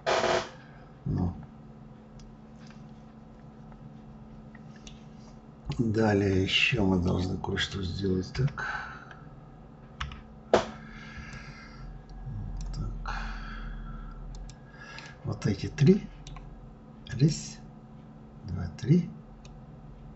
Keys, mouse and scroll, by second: 6.7-8.0 middle drag, 8.0 KP_1, 11.0 click, 12.7-13.5 scroll down 1, 13.6-14.0 scroll down 1, 14.0 click, 14.7-16.7 middle drag, 16.7 click, 19.1-20.1 middle drag.